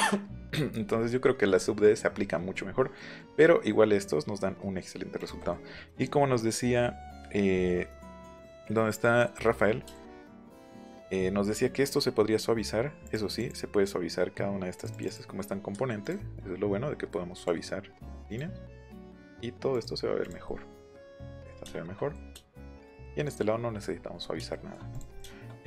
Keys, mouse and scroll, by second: 0.4 scroll down 2, 0.5 scroll up 2, 0.7 scroll down 2, 1.2 middle click, 1.8 middle click, 2.9 middle click, 5.1 click, 13.0 click, 13.3 click, 14.7 click, 16.0 click, 17.3 click, 18.2 click, 19.7 click, 20.2 click, 20.4 middle click, 21.6 shift+middle click, 22.3 shift+middle click, 22.9 middle click, 23.9 middle click, 24.2 middle click, 24.4 shift+middle click, 24.9 click.